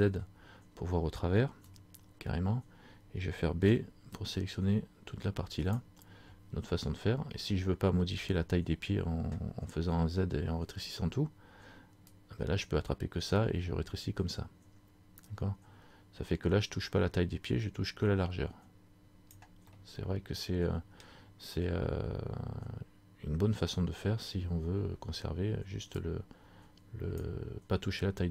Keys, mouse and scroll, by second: 0.2 z, 1.7 a, 12.3 click, 19.9 middle click, 26.1 click.